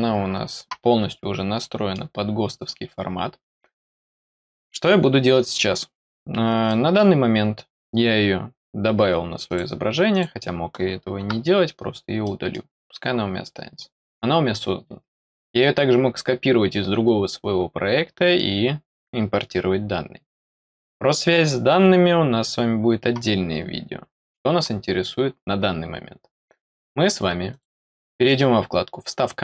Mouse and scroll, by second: 1.4 scroll down 1, 1.6 middle click, 6.6 middle click, 9.4 click, 10.1 click, 12.2 middle click, 27.5 click.